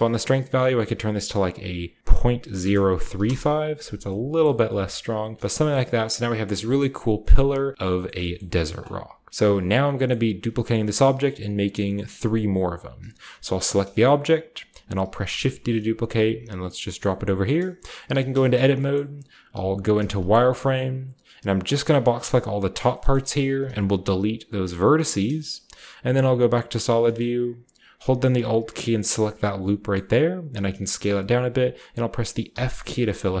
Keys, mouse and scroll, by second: 0.1-2.0 drag, 2.5-3.1 typing, 3.2 Return, 4.4-7.1 typing, 4.5-7.3 middle drag, 4.5-5.4 scroll down 1, 6.6-7.1 shift+scroll up 1, 7.1 scroll down 1, 7.7-9.2 scroll up 1, 8.1-9.9 shift+middle drag, 9.2-10.7 scroll down 2, 10.7 shift+scroll down 1, 12.7-13.4 scroll up 1, 13.4-14.6 shift+middle drag, 13.4-14.6 scroll up 1, 15.0 typing, 15.3-16.5 scroll up 1, 16.5-18.4 shift+drag, 16.5-18.0 scroll up 1, 18.0 Tab, 18.0-18.6 scroll up 1, 18.4 typing, 18.6-20.9 shift+middle drag, 18.6-19.4 shift+scroll down 1, 19.4-20.9 shift+scroll down 1, 19.4-20.5 typing, 22.1 click, 23.5 x, 24.5 click, 25.5-28.7 shift+scroll up 1, 26.1 z, 26.6 z, 28.4 typing, 29.1-31.1 alt+middle drag, 30.5 typing, 31.2-32.3 drag, 32.4 typing, 33.2-33.4 scroll down 1.